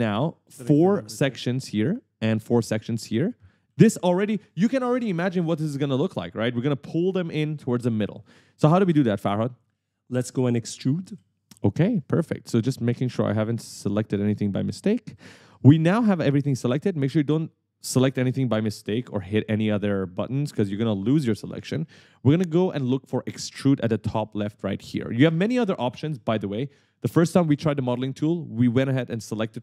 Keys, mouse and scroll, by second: 1.0-5.4 typing, 9.8-11.4 typing, 13.9-16.0 typing.